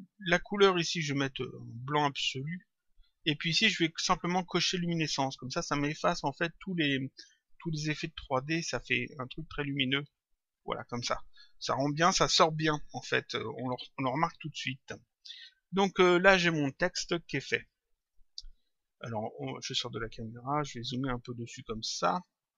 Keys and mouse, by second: 0.7 click, 2.4 click, 4.8 click, 8.4 click, 9.6 click, 17.2 click, 19.4 click, 20.8 click.